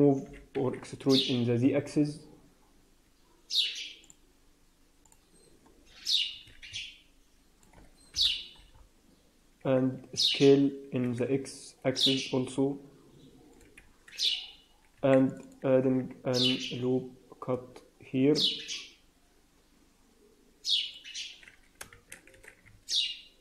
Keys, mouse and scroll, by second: 0.2 g, 5.0 click, 5.8 scroll up 2, 6.2-6.6 scroll down 3, 6.6 middle click, 8.0 KP_1, 8.6 scroll up 2, 9.5 s, 14.8 ctrl+r, 15.7 s, 21.8 shift+z, 22.2 a.